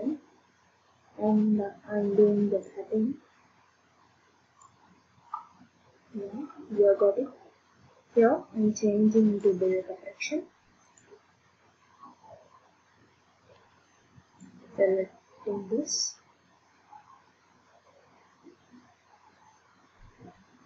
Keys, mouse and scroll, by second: 2.6 click, 4.6 click, 9.4 click, 11.0 click, 14.4 click, 19.5 click.